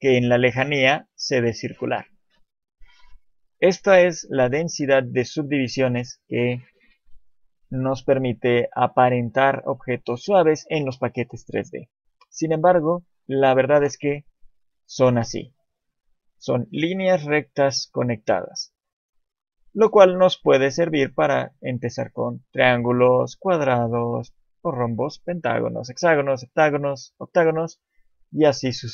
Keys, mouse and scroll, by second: 0.1 scroll down 3, 2.6-3.1 scroll up 3, 3.3 shift+middle click, 3.7-4.4 scroll up 1, 4.4 shift+middle click, 4.4-5.4 scroll up 1, 12.8 click, 21.6 click.